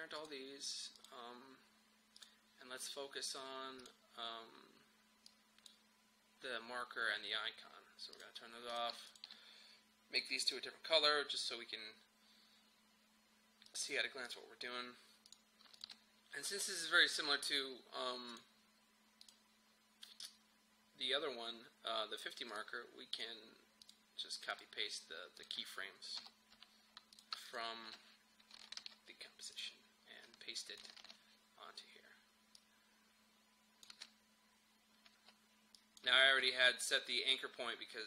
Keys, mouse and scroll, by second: 13.7 click, 22.6 click, 26.2 u, 27.2 click, 28.8 ctrl+c, 29.6 click, 31.0 ctrl+v, 32.6-33.9 drag, 33.9 space, 35.8 click, 36.2 space.